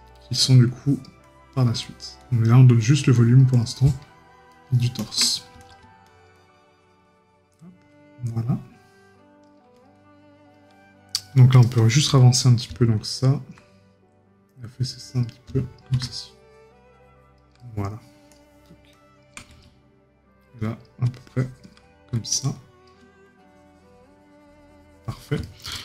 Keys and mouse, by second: 0.1 right click, 3.7 right click, 17.6 right click, 25.4 right click.